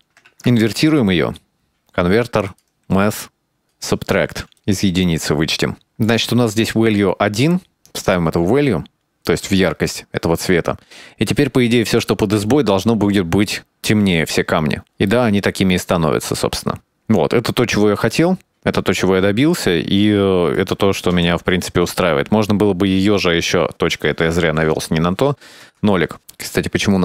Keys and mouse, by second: 0.4 middle click, 0.7 click, 1.0 middle click, 1.7 shift+a, 3.5-4.4 drag, 4.8 click, 5.4 click, 5.9-6.2 drag, 6.4 middle click, 7.0 middle click, 7.5 middle click, 7.9 click, 8.3 click, 8.9-9.6 drag, 15.4-16.7 shift+middle drag, 16.9-17.9 middle drag, 19.7-21.5 shift+middle drag, 22.0 KP_Decimal, 26.0 KP_0, 26.2-27.0 shift+middle drag.